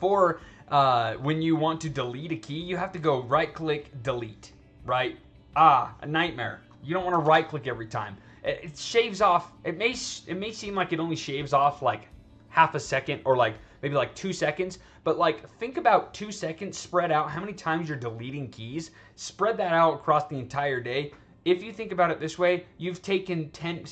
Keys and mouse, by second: 3.0 right click, 4.4 click, 7.1 ctrl+z.